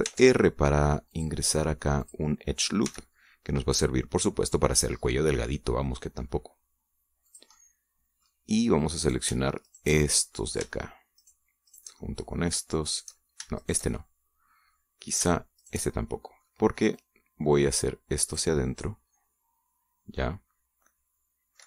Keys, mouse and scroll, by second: 0.8 ctrl+r, 1.9 click, 2.9 click, 3.7 s, 8.1-9.2 drag, 8.4 right click, 9.8 right click, 10.5 shift+right click, 10.8 shift+middle click, 12.0 shift+right click, 12.5 shift+right click, 12.8 shift+middle click, 13.7 shift+right click, 14.4 shift+right click, 14.7-16.1 shift+middle drag, 16.4 shift+right click, 16.7 shift+middle click, 17.7-21.6 drag, 19.3-21.6 middle drag, 19.3-21.6 right drag.